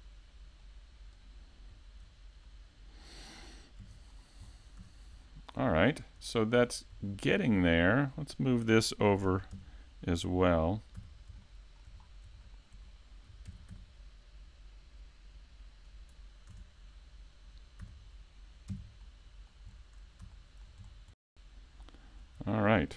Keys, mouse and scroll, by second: 1.1 middle click, 1.1 right click, 2.4 middle click, 3.8 KP_5, 4.1-4.8 scroll down 1, 4.8-5.2 scroll down 3, 4.8 a, 5.2 shift+middle click, 5.8 middle click, 7.1 shift+middle click, 8.1 right click, 8.5 scroll up 1, 9.2 KP_7, 9.6 KP_5, 11.0 :, 11.4 shift+middle click, 12.0-13.5 scroll up 4, 12.4 shift+middle click, 13.5 shift+d, 16.0 click, 16.5 a, 17.8 e, 18.7 KP_5, 19.0 middle click, 19.7-20.1 scroll down 1, 20.3 shift+middle click, 20.9-21.3 scroll down 2, 21.3 middle click, 22.0 shift+middle click, 22.5 middle click.